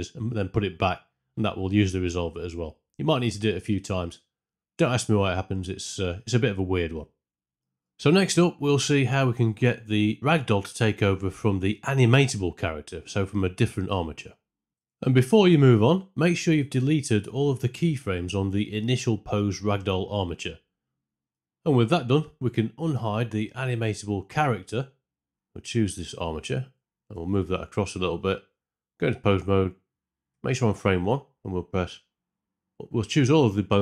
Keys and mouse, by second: 7.4 shift+Left, 7.4 space, 24.4 click, 24.9 middle click, 27.0 g, 27.2 x, 29.0 Tab, 30.2 a.